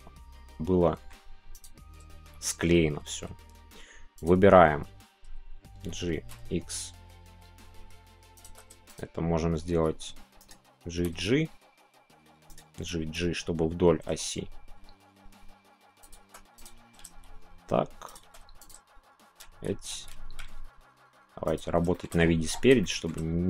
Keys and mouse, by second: 0.3 middle click, 5.8 g, 8.4 click, 8.9 click, 9.8 z, 10.4 right click, 10.9 g, 11.1 g, 12.7 g, 13.0 g, 16.0 shift+click, 18.0 shift+click, 18.1 shift+middle click, 19.4 ctrl+z, 21.5 click, 21.9 middle click, 22.8 shift+middle click.